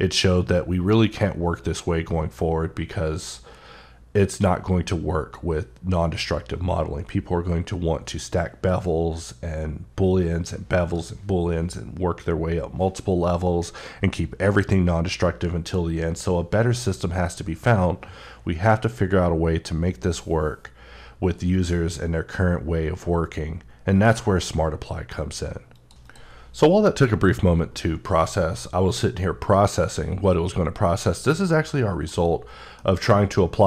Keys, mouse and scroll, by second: 32.6 click, 32.6 middle click.